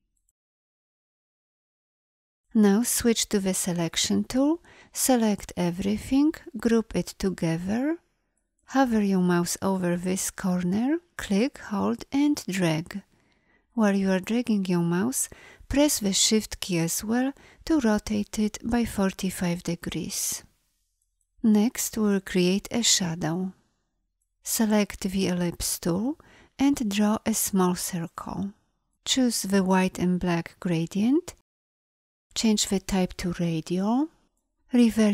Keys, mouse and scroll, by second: 3.3 v, 6.7 ctrl+g, 24.8 l.